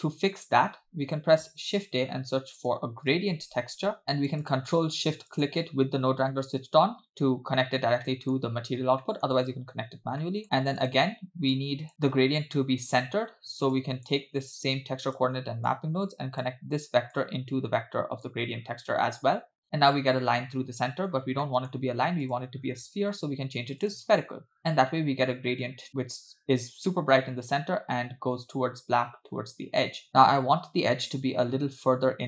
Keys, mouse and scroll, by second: 0.6 space, 1.7 shift+a, 4.0 click, 5.5 ctrl+shift+click, 8.0 middle click, 9.0 middle click, 10.3 middle click, 10.8 click, 11.6-11.9 drag, 13.8 click, 14.8-15.2 drag, 15.7-16.5 drag, 17.2-18.5 drag, 21.1-21.4 scroll up 2, 21.5 middle click, 21.8 scroll up 1, 22.3-24.2 drag.